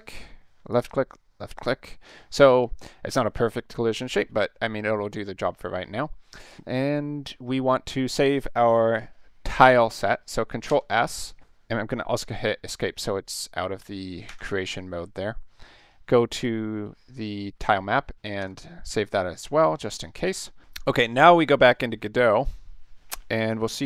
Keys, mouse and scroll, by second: 0.7 click, 1.6 ctrl+shift+click, 6.4 click, 10.7 ctrl+s, 14.3 Escape, 16.3 click, 18.4 ctrl+s, 21.1 click.